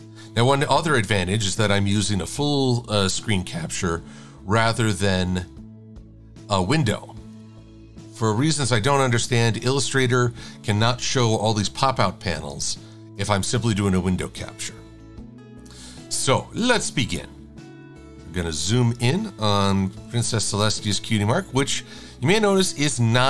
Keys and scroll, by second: 19.8 super+=.